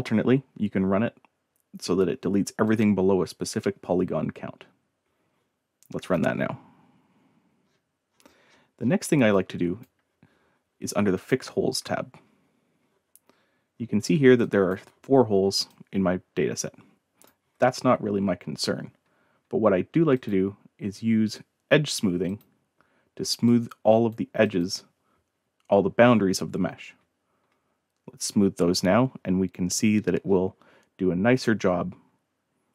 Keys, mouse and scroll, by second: 2.6 click, 6.0 click, 7.6 scroll up 1, 8.0-8.9 scroll down 4, 9.3-9.8 drag, 11.1 click, 13.3 scroll up 1, 13.7-14.2 scroll down 3, 14.3-14.6 right drag, 14.4 drag, 15.7-17.2 drag, 20.1 click, 22.2 click, 23.4-24.1 drag, 24.4 click, 28.7 scroll up 1, 29.1 scroll down 1, 29.7 scroll up 1, 30.2 scroll up 1, 31.3 click.